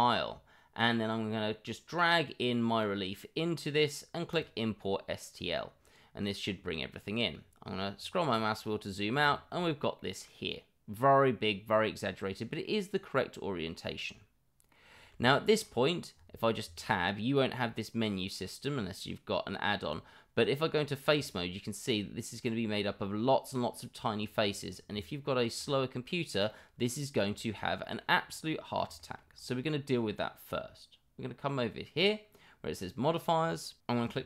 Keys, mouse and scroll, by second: 8.6-9.1 middle drag, 9.3 middle drag, 9.9-14.7 middle drag, 15.2 middle drag, 26.4-27.1 middle drag, 27.3 middle drag, 27.8 middle click, 28.5 middle click, 28.9 middle drag.